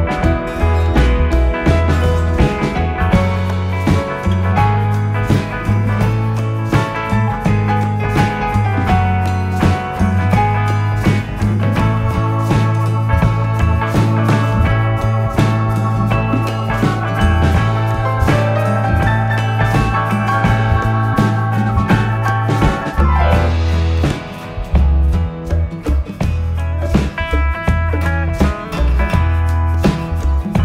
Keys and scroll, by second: 6.6 i, 9.1 v, 23.3 i, 27.0 v.